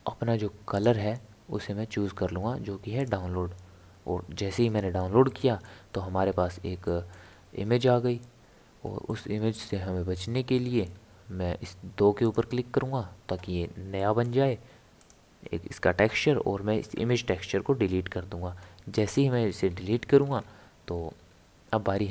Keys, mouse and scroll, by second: 0.7-3.9 drag, 5.3-6.3 middle drag, 6.3 scroll up 2, 6.5 scroll down 1, 6.6 scroll up 1, 6.9 middle click, 7.3-9.1 scroll up 1, 9.1-10.6 middle drag, 10.6 scroll up 1, 10.6 scroll down 1, 10.7-12.2 scroll up 1, 12.2-14.0 drag, 14.0-15.0 middle drag, 15.0 click, 16.7 Delete, 18.9 middle click, 19.4 scroll up 1, 19.5 scroll down 1, 19.6-21.0 scroll up 7, 21.0 scroll down 1, 21.0-22.1 scroll up 3.